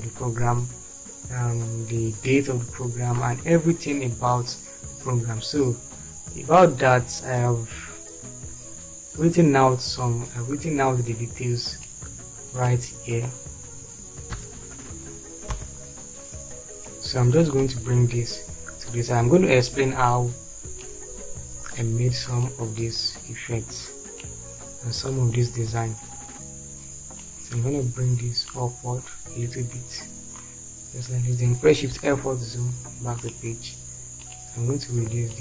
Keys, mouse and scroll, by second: 14.9 p, 15.8 shift+F4, 31.9 shift+F4.